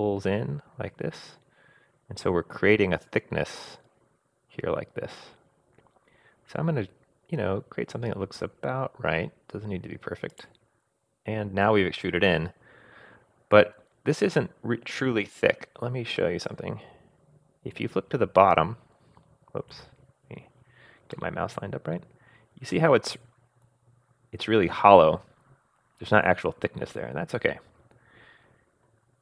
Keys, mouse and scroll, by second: 16.2-19.7 middle drag, 21.1-29.0 middle drag.